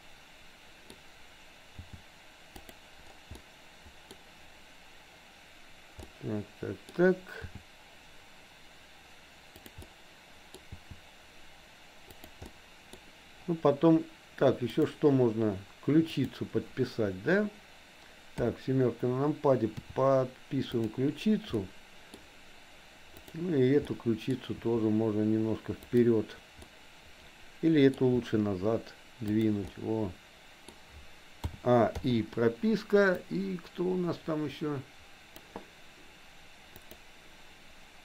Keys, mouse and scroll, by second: 1.8 g, 3.4 scroll up 1, 3.6 middle click, 6.0 scroll up 1, 6.3 middle click, 7.5 g, 9.9 middle click, 10.6 g, 12.5 scroll up 1, 12.6 middle click, 14.8 click, 16.1 click, 18.4 KP_7, 19.9 r, 21.6 middle click, 21.8 scroll down 1, 21.9 middle click, 23.3 click, 23.9 middle click, 24.5 r, 26.8-28.0 middle drag, 28.1 r, 29.8-30.8 middle drag, 31.5 a, 32.1 i, 33.3-35.5 drag, 36.8 click.